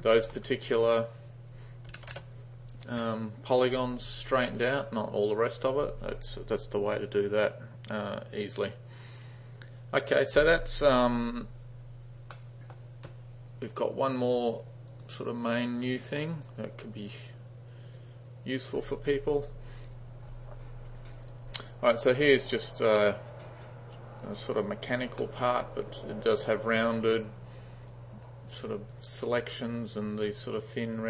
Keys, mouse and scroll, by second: 0.0-2.7 typing, 12.4-12.8 middle drag, 14.9 click, 16.4 drag, 17.9 click, 21.3 click, 21.9-22.3 drag, 22.5 click, 24.3-24.9 drag, 25.3 middle click, 25.7-26.4 drag, 26.9-27.3 drag, 27.9-28.3 drag, 28.9 click.